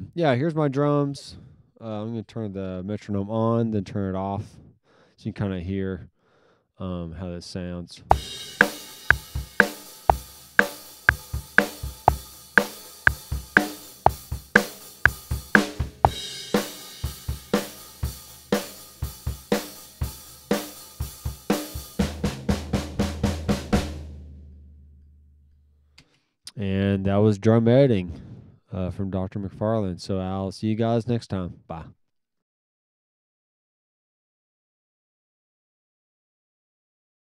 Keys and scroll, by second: 7.9 space, 26.0 space.